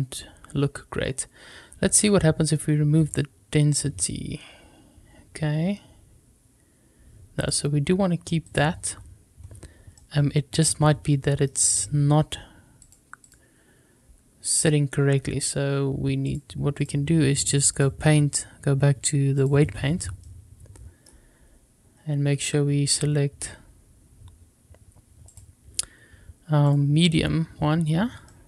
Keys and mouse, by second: 7.4-8.5 drag, 9.9-12.7 middle drag, 12.7 click, 16.2 click, 17.7-19.4 drag, 20.5 middle click, 25.2 click, 26.6 click, 28.2 shift+middle click.